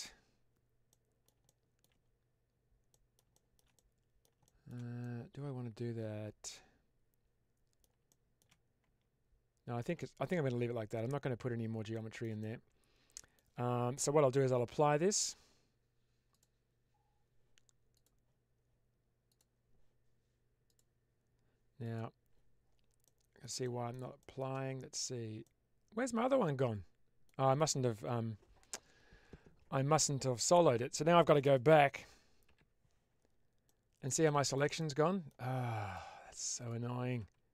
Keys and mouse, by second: 0.8 middle click, 1.3 shift+middle click, 2.8 middle click, 3.2 shift+middle click, 3.6 middle click, 4.4 shift+middle click, 4.9-7.7 middle drag, 8.1 shift+middle click, 8.7 Tab, 9.6 Tab, 11.3 Tab, 11.8 shift+middle click, 12.3 middle click, 14.3 Tab, 16.3-17.2 drag, 17.8 click, 19.2 click, 20.5-22.2 drag, 22.9-23.3 middle drag, 23.6 shift+middle click, 24.1 shift+middle click, 25.3-27.1 middle drag, 33.5-33.9 middle drag, 34.1-34.5 shift+middle drag, 34.7-35.2 middle drag.